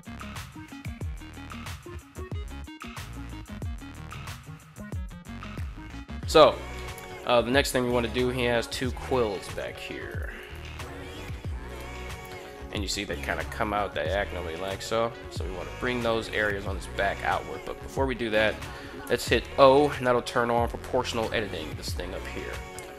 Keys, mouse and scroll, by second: 0.0-2.6 typing, 0.1 right click, 0.3 click, 0.4 right click, 1.0 right click, 1.3 right click, 1.5 click, 1.7 right click, 1.9 drag, 2.1 right click, 2.4 click, 3.4 right click, 3.7 g, 4.0 right click, 4.2 g, 4.3 drag, 5.0 middle click, 5.4 KP_3, 6.5-6.9 middle drag, 8.8 3, 9.1 right click, 9.9 right click, 10.2 shift+right click, 11.4 KP_1, 14.0 g, 14.4 x, 16.1 right click, 18.8 o.